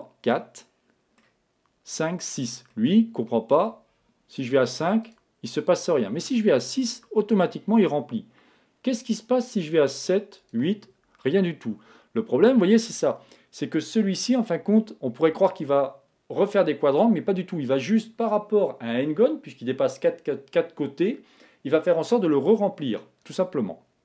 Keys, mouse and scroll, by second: 0.4-2.1 middle drag, 2.7-4.4 middle drag, 5.1-8.2 drag, 9.9-12.0 drag, 11.2-13.0 middle drag.